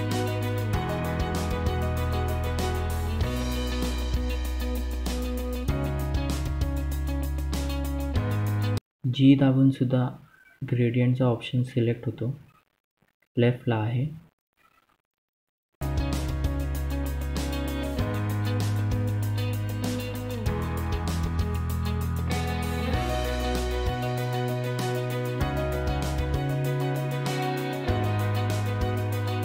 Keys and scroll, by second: 3.1-3.6 typing, 8.2 g, 27.7 F2.